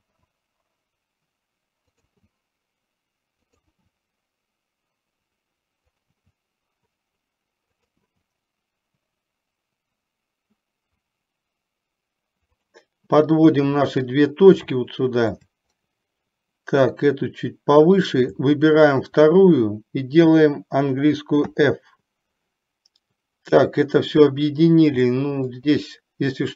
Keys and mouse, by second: 0.2 e, 3.8 e, 6.3 e, 8.2 e, 14.8 shift+middle click, 17.2-18.2 drag, 25.3 shift+middle click.